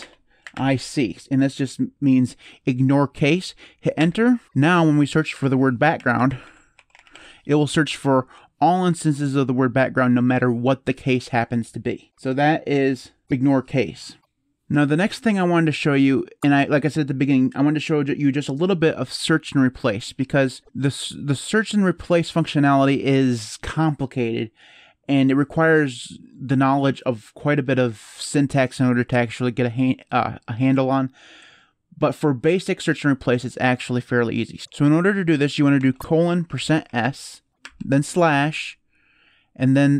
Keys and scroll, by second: 0.0-1.7 typing, 3.7 Return, 5.1-7.4 typing, 20.5 BackSpace, 35.5-38.0 typing.